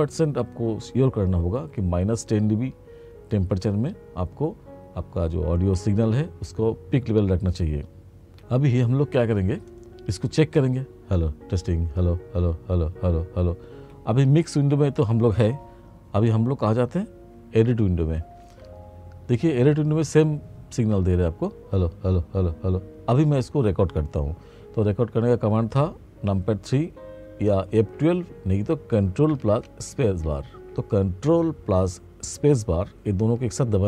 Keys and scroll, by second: 18.2 ctrl+=.